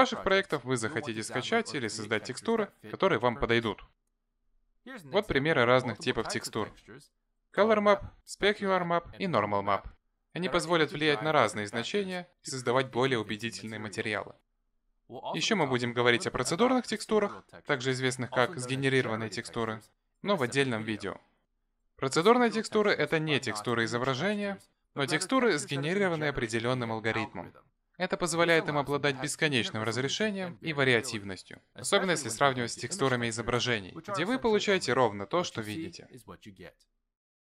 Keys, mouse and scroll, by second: 2.4-3.2 scroll down 3, 3.2 shift+middle click, 3.7 middle click, 27.7 click, 29.1 click, 30.3 click, 31.8 click, 34.0 click, 34.7 click.